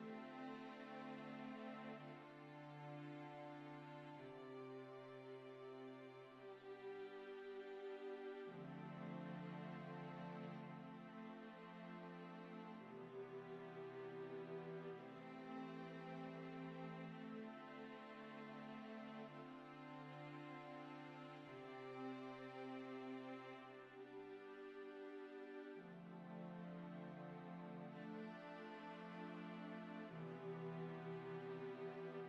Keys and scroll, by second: 2.0-7.4 typing, 8.5-12.5 typing, 14.0-14.8 typing.